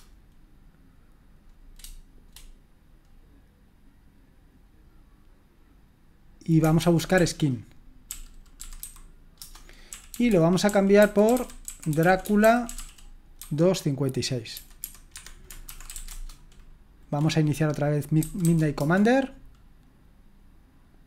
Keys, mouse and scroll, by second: 6.9-13.4 typing, 14.5 typing, 15.1 Escape, 15.9-16.8 typing, 17.9-18.9 typing.